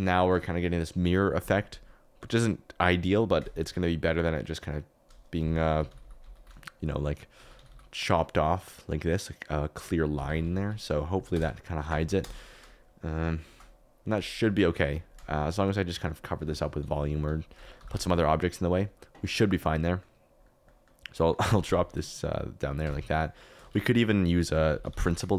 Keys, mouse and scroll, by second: 0.2 shift+right click, 5.6-6.3 typing, 7.3 g, 7.5 y, 7.6 y, 10.1 Escape, 10.5 ctrl+z, 11.3 KP_0, 12.1 KP_0, 16.4 Tab, 16.8 3, 17.2 3, 17.7 g, 17.9 z, 21.4 g, 21.6 z, 21.7 z, 22.8 Tab, 23.6 shift+a.